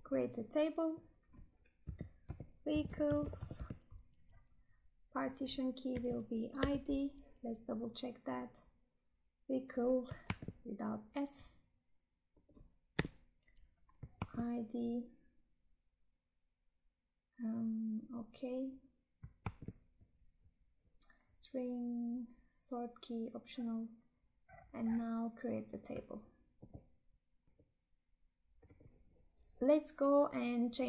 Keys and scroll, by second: 10.3 Tab, 14.2 Tab, 19.5 Tab.